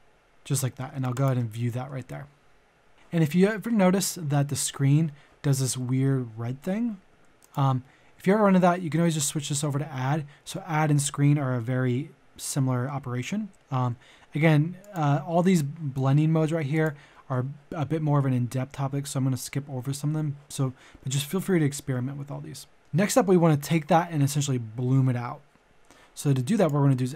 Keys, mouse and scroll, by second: 1.1 ctrl+shift+click, 22.8 middle click, 26.5 click.